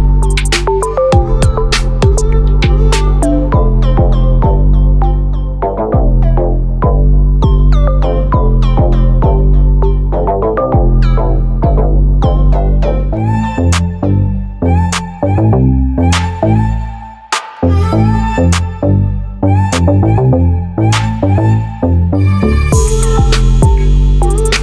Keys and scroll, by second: 5.4 ctrl+t, 17.2 ctrl+t.